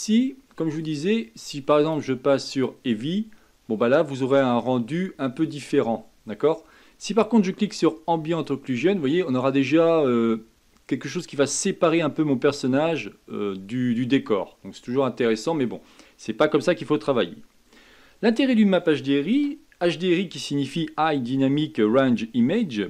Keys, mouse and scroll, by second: 0.8 click, 1.8-4.9 drag, 5.5 click, 8.3 click, 9.0-12.1 scroll up 2, 12.7-14.5 scroll down 2.